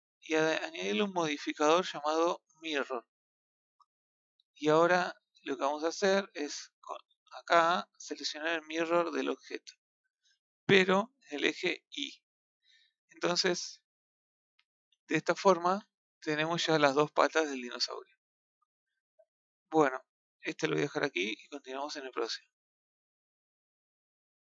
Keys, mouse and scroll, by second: 3.3-3.9 drag, 3.9-4.7 middle drag, 7.5 click, 10.8-12.0 drag, 12.0-13.7 middle drag, 13.7-14.1 scroll up 2, 14.2-15.6 middle drag, 15.6 a, 15.9-20.3 middle drag, 20.6-24.4 shift+middle drag.